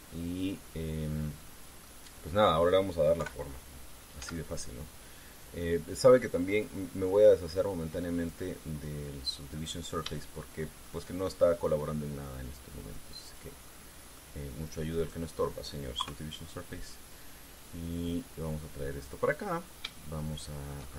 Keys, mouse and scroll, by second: 2.6 middle click, 3.9 KP_3, 4.9 z, 7.2 click, 8.9 click, 10.4-10.8 scroll up 1, 11.0 shift+middle click, 14.0 click, 14.4 middle click, 15.6 right click, 16.7 KP_3, 18.2-20.0 drag, 20.6-20.9 shift+middle drag.